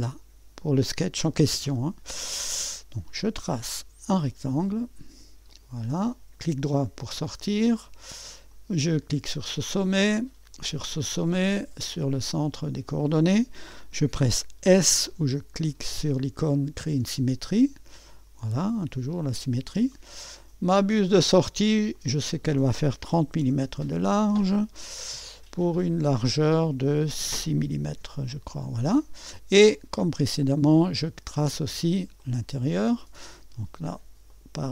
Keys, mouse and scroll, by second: 0.0 click, 3.7 click, 4.6 click, 5.5 click, 6.0 middle click, 8.5 click, 10.5 click, 12.2 click, 16.9 s, 18.6-20.0 drag, 20.8 click, 22.0 click, 22.9-23.9 typing, 25.6-27.0 drag, 26.8-28.0 typing, 30.1 click, 30.8 click, 32.2-33.3 drag, 34.3 click.